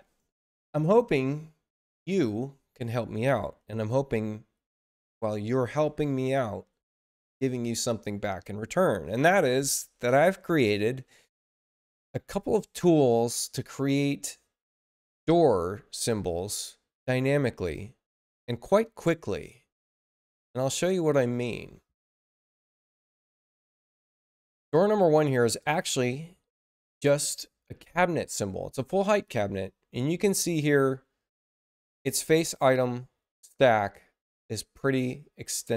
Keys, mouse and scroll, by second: 23.9 click, 25.2 click, 25.5 click, 29.8-30.2 middle drag, 30.4 middle click, 30.9 middle click, 31.4 middle click, 31.9 middle drag, 34.8 middle click, 35.3 middle click.